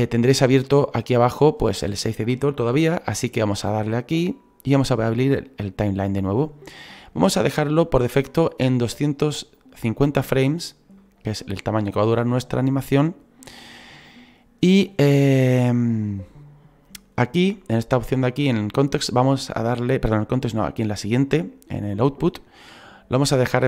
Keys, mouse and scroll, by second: 1.0-18.6 drag.